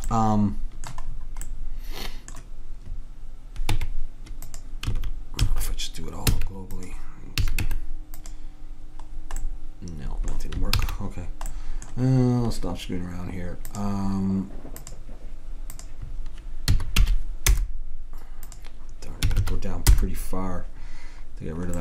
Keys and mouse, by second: 3.8 Tab, 5.0 a, 5.5 a, 6.3 e, 7.5 a, 7.7 Tab, 10.8 ctrl+z, 13.8-17.7 drag, 18.6-20.4 drag, 19.4 2.